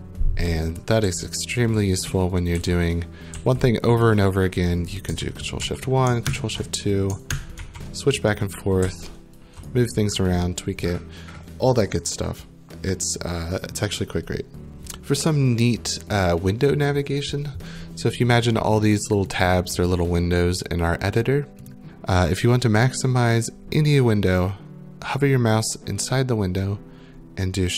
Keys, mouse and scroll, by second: 0.8-3.3 typing, 3.9 right click, 5.6 ctrl+shift+1, 6.3 ctrl+shift+2, 7.6 ctrl+shift+1, 8.6-9.8 typing, 9.7 right click, 19.0 click, 19.4 click, 21.7 click.